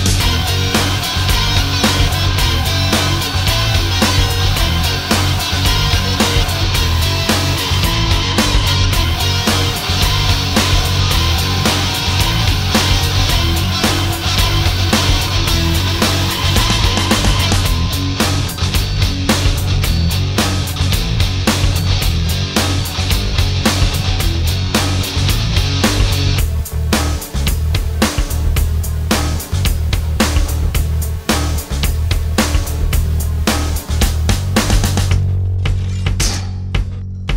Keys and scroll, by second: 12.7 alt+space, 13.9 space, 33.7 space.